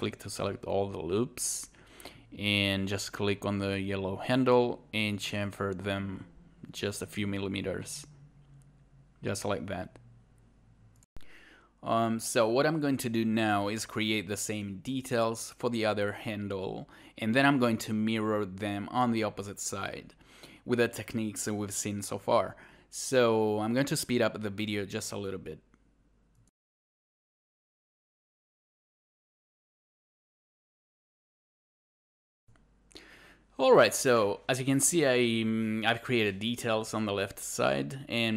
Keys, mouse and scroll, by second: 9.3 alt+click, 9.9 alt+right click, 10.0 alt+click, 11.0 shift+2, 26.0-28.3 scroll up 2, 26.1 click, 28.3 alt+click, 28.4 alt+click, 28.6 click, 28.7 scroll down 1, 28.9 scroll up 1, 28.9 click, 29.5 right click, 29.5 scroll up 1, 29.6 alt+click, 30.1 scroll up 1, 30.7 alt+right click, 31.0-31.7 scroll down 1, 31.7 shift+a, 31.9 scroll up 1, 32.0 alt+click.